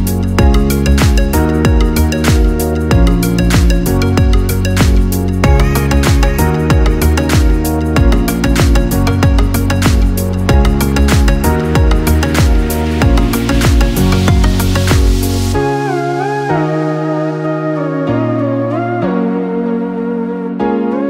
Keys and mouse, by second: 2.3 click, 3.1 shift+click, 4.3 click, 5.3 g, 10.4 click, 11.5 shift+click, 13.4 click, 14.9 shift+click, 16.0 j.